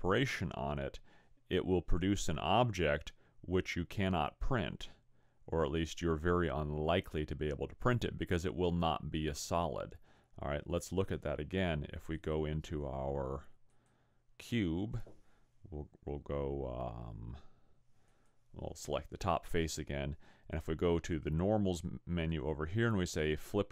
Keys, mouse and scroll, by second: 12.2 click, 17.0 a, 18.0 click, 23.4 click.